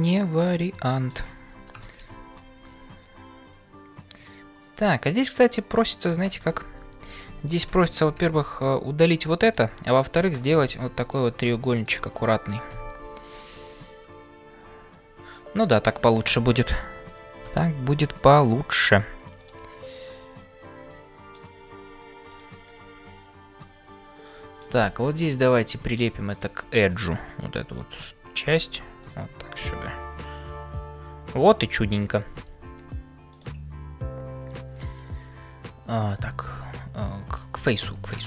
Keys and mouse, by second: 2.3-6.1 middle drag, 7.2 3, 9.6 middle click, 10.7 2, 11.0 click, 11.7 shift+click, 13.4-15.5 middle drag, 16.3 1, 16.6 click, 20.1-21.5 middle drag, 22.2 click, 22.8-24.7 middle drag, 25.5-26.6 drag, 27.1 middle click, 29.6-31.9 middle drag, 33.3-37.9 drag.